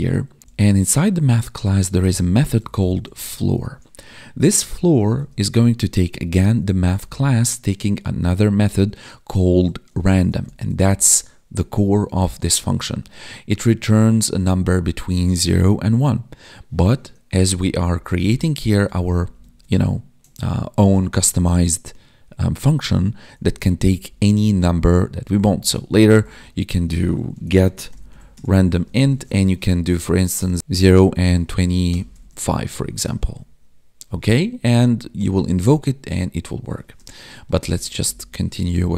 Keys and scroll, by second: 17.2 Escape, 17.5 Up, 17.6 Left, 18.5 Right, 18.8 ctrl+shift+Left, 19.3 ctrl+shift+Right, 23.4 Right, 23.5 Left, 25.8 Down, 28.3 Tab, 32.5 Escape, 33.0 Right, 34.7 ctrl+shift+Left, 37.5 ctrl+Left, 38.6 Left.